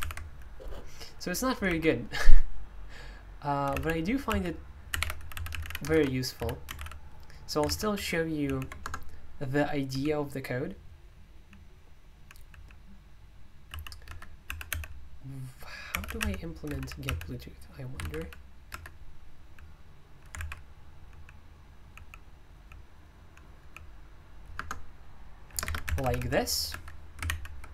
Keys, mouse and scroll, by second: 0.0 super+u, 1.6 super+l, 3.7-8.4 typing, 8.8 Return, 9.6-24.1 typing, 14.0 Escape, 20.4 alt+i, 24.5 Return, 25.4-26.7 typing, 26.7 Escape, 27.3 ctrl+o.